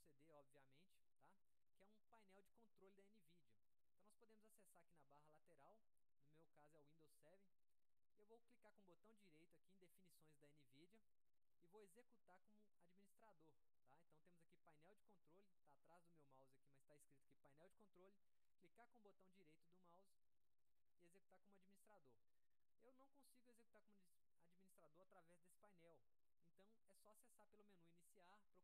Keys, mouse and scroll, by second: 5.1 click, 11.0 right click, 18.5 right click, 20.7-21.3 drag.